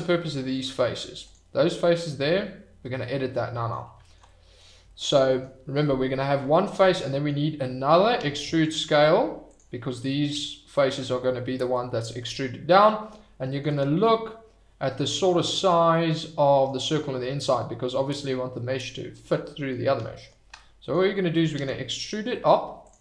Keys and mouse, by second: 1.2 click, 2.9 click, 4.3 click, 5.2 click, 7.1 click, 8.1 e, 8.4 s, 9.4 click, 10.4-12.2 middle drag, 12.3 middle click, 13.8-15.5 middle drag, 16.0 middle click, 17.0 middle click, 18.7 middle click, 19.5 middle click, 20.5 middle click, 21.5 e, 22.8 click.